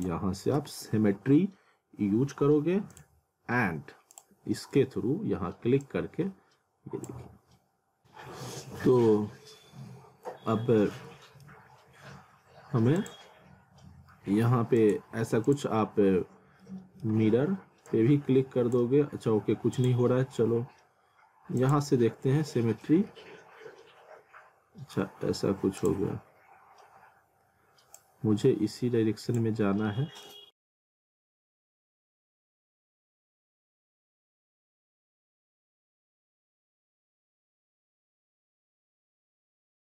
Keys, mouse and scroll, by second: 0.6-1.2 typing, 2.9 click, 9.9 scroll up 1, 10.5 middle click, 11.0 scroll down 1, 11.2 middle click, 13.0 click, 16.6 middle click, 17.9 click, 23.1 alt+middle click, 25.8 click, 28.0 click, 29.9 alt+middle click, 30.6 click, 32.7-33.5 scroll down 1, 33.5 scroll up 1, 33.6 alt+middle click, 34.0 click, 34.6 ctrl+z, 35.4 click, 38.5 click, 39.5 click.